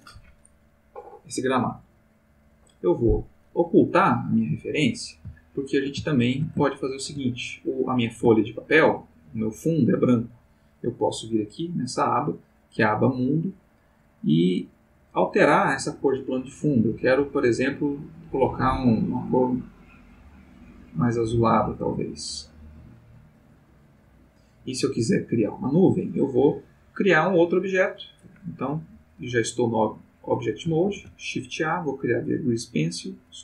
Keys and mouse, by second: 4.4 click, 5.5-6.5 ctrl+middle drag, 6.6 ctrl+shift+middle click, 8.3-9.1 ctrl+middle drag, 11.9 click, 15.1 click, 16.9 click, 19.7 click, 21.2 click, 30.8 shift+a, 32.7 click.